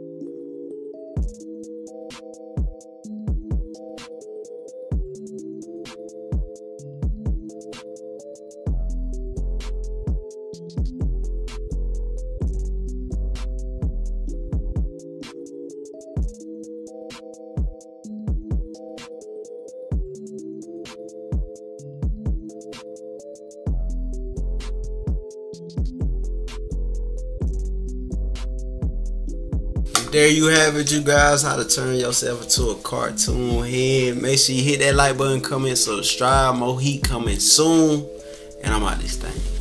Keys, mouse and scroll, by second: 0.3 -, 0.6 scroll up 1, 0.6 =, 0.7 scroll down 1, 1.0 -, 1.5 click, 1.9 click, 2.1 click, 2.3 click, 2.9 click, 3.4 click, 3.6 click, 3.8 click, 4.1 click, 4.5 click, 5.1 z, 5.8 click, 6.3 click, 6.8 click, 7.2 click, 7.5 click, 8.0 click, 8.3 click, 8.6 click, 8.8 click, 9.8 click, 10.2 ctrl+-, 10.4-10.8 scroll up 4, 10.6 ctrl+=, 10.9 click, 11.9 click, 12.2 click, 12.6 click, 13.3 click, 13.6 click, 13.7 click, 13.9 click, 14.3 click, 14.6 click, 14.9 click, 15.3 click, 15.6 click, 15.8 click, 16.7 click, 17.3 -, 17.6 =, 17.7 scroll down 2, 18.0 click, 18.3 click, 18.5 click, 18.8 click, 19.1 click, 19.4 click, 19.8 click, 20.2 click, 20.5 click, 20.8 click, 21.1 click, 21.6 click, 21.8 click, 22.0 click, 22.8 =, 23.0 scroll up 2, 23.3 click, 24.4 click, 24.5 click, 24.7 click, 25.2 click, 25.4 click, 25.5-26.0 scroll up 3, 25.7 click, 26.0 click, 26.4 click, 26.7 click, 27.1 click, 27.3 click, 27.4 click, 27.5 click, 28.0 click, 28.3 click, 29.1 -, 29.3 scroll down 2, 29.4 =.